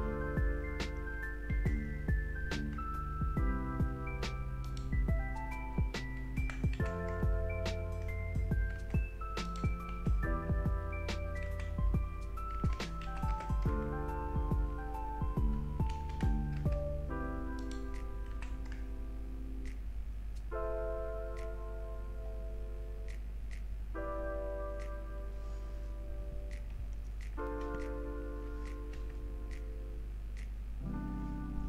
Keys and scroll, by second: 0.8 Return, 2.0 BackSpace, 4.5 Return, 6.4 Left, 6.7 typing, 8.8 Return, 9.7 BackSpace, 10.1 Down, 11.8-13.8 typing, 15.7 Return, 16.1 BackSpace, 16.6 BackSpace, 18.3 0, 18.7 1, 19.6 Return, 29.0 BackSpace.